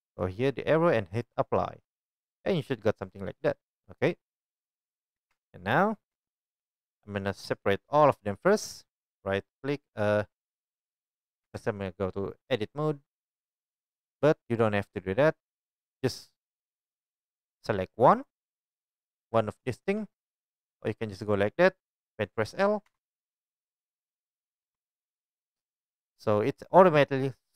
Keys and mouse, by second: 0.0-2.1 drag, 5.3 Tab, 5.3-8.3 middle drag, 6.1 Tab, 8.3 click, 8.4 middle click, 8.8-19.4 right drag, 11.4 Tab, 19.4-21.0 shift+drag, 22.9 l, 24.7 l.